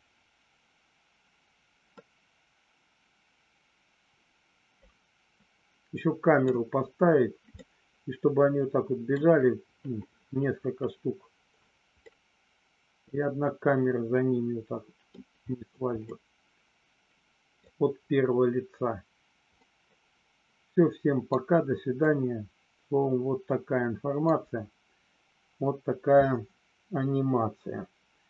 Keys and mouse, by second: 2.1-6.5 middle drag, 7.7-9.3 middle drag, 12.2-15.3 middle drag, 16.3-17.9 middle drag, 19.8-21.7 middle drag, 22.3-24.4 middle drag.